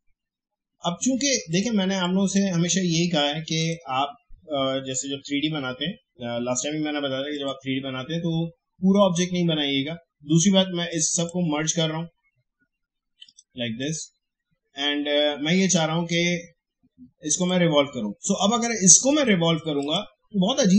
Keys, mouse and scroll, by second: 1.5-3.6 drag, 7.3 click, 10.9-13.2 drag, 17.3 click, 19.8-20.7 drag.